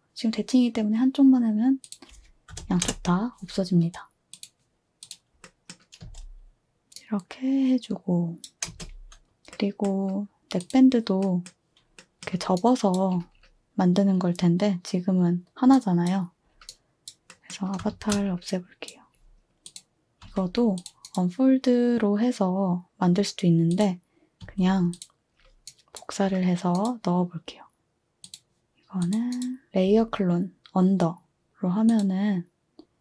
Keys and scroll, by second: 2.5-2.8 typing, 6.0 space, 8.7 space, 17.9 a, 20.2 z, 24.4 a.